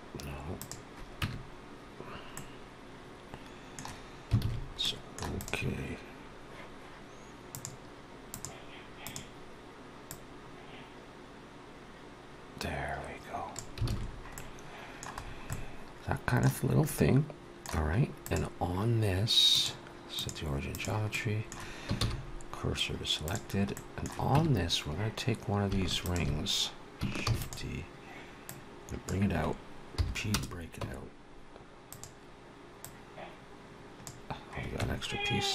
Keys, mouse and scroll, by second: 1.1 Tab, 2.2 middle click, 4.3 alt+a, 4.7 middle click, 5.9 click, 7.8 click, 10.2 click, 13.7 alt+a, 13.9-14.3 scroll down 3, 14.2 middle click, 15.1 scroll down 2, 15.3 middle click, 16.5 scroll up 2, 16.7 middle click, 17.7-18.1 scroll up 2, 18.1 click, 19.3 click, 21.0 middle click, 21.8 shift+s, 23.6 middle click, 24.2 Tab, 24.8-25.3 scroll up 2, 25.9 alt+shift+click, 27.1 shift+d, 28.3 click, 29.8 p, 30.6 Tab, 31.7 click, 33.4 click, 34.6 Tab.